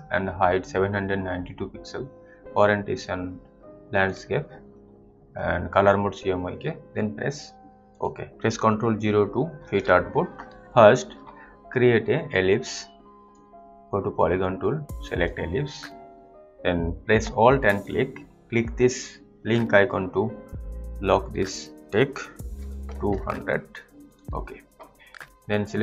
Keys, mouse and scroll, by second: 4.0 click, 7.8 click, 9.5 ctrl+0, 13.6 click, 17.7 alt+click, 18.3 click, 21.8 click, 22.5-23.0 typing, 24.1 click.